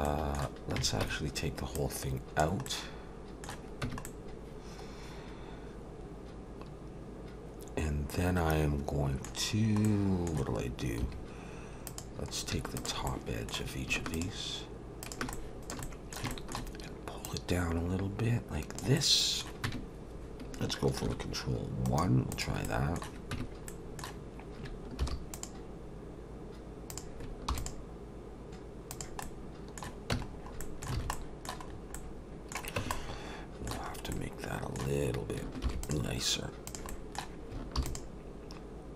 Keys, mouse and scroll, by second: 0.0 middle click, 1.0 Tab, 1.7 click, 2.7 middle click, 3.8 Tab, 4.1 middle click, 9.8 middle click, 11.0 2, 11.9 click, 12.8 shift+click, 13.1 middle click, 14.1 shift+click, 15.0 shift+click, 15.3 middle click, 15.6 shift+click, 15.8 middle click, 16.3 shift+middle click, 17.2 click, 19.0 middle click, 19.6 Tab, 21.1 ctrl+1, 21.9 right click, 22.6 middle click, 23.3 Tab, 23.7 middle click, 25.0 ctrl+r, 27.5 ctrl+r, 29.2 middle click, 30.1 Tab, 30.3 scroll down 3, 30.9 middle click, 30.9 alt+a, 31.1 middle click, 31.7-32.3 scroll up 2, 31.9 middle click, 32.8 Tab, 32.9 middle click, 33.9-34.4 scroll up 2, 34.1 middle click, 35.6 ctrl+r, 36.9 middle click, 37.8 ctrl+r.